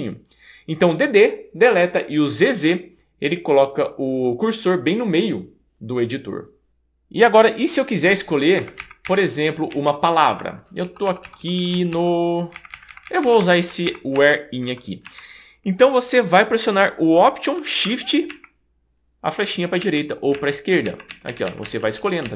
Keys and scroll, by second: 8.6 Up, 9.0 Up, 9.7 Right, 10.2 Left, 10.9 Down, 11.1 Down, 11.2 Down, 11.4 Down, 11.6 Down, 11.7 Down, 11.9 Down, 12.5 Up, 12.7 Up, 12.9 Up, 13.1 Up, 13.2 Up, 13.4 Up, 13.9 Up, 14.2 Up, 15.1 Right, 18.3 alt+shift+Right, 19.8 alt+shift+Right.